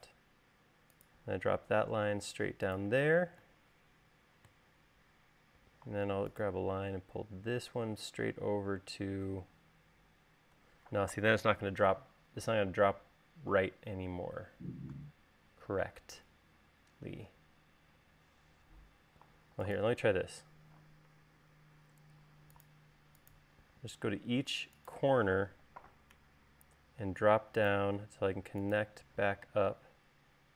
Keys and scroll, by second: 11.8 l, 13.2 e, 16.5 l.